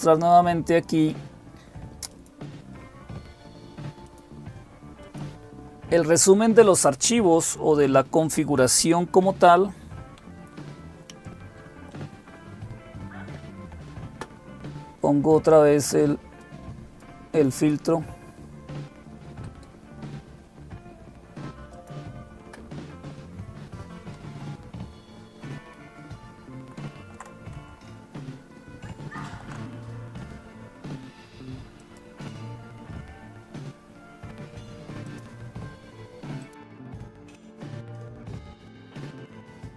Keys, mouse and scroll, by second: 1.9 click, 3.8-5.0 drag, 16.2-17.5 drag, 19.2-21.5 right drag, 21.5-22.5 drag, 26.2 ctrl+super+Right, 27.8 alt+super+Left, 28.1 alt+super+Left, 28.8 alt+super+Left, 31.6 alt+super+Left, 31.6 click, 34.9-35.9 drag, 36.2 click, 38.9 ctrl+super+Right, 39.5 ctrl+super+Right, 39.6 ctrl+super+Right.